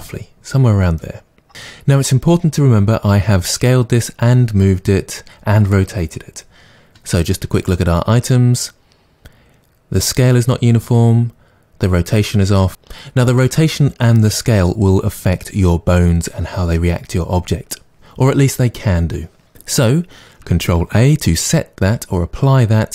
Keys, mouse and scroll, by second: 0.0 click, 7.6 click, 20.8 ctrl+a.